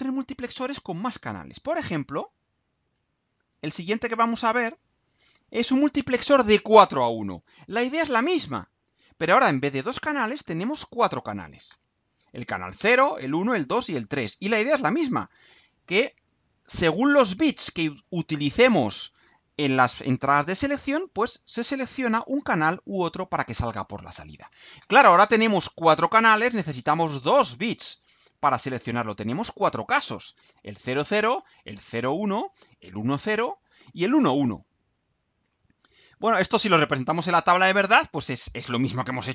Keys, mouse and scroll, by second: 0.3 scroll up 2, 0.5-0.9 scroll down 2, 1.4-2.1 scroll down 4, 2.5 ctrl+scroll down 2, 3.9 ctrl+scroll down 2, 4.5-5.2 ctrl+scroll up 4, 35.5-36.6 scroll down 6.